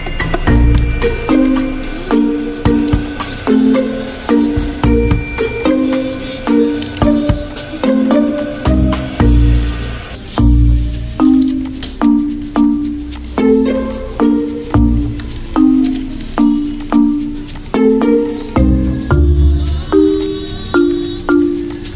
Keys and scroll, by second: 5.6 alt+shift+z, 11.9 Escape, 14.0 ctrl+z, 17.5 ctrl+x, 21.2 Escape.